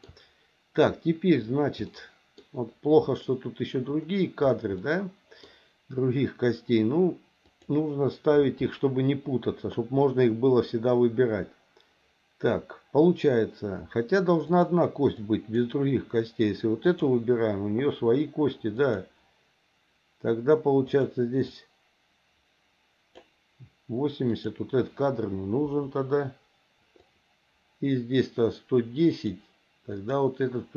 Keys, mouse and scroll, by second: 2.0 middle click, 4.8 middle click, 7.5 click, 14.5 click, 15.3 click, 16.9 click, 18.8 click, 20.9 click, 21.5-23.3 drag, 24.3 click, 25.7 Delete, 27.0-29.4 drag, 29.9 click.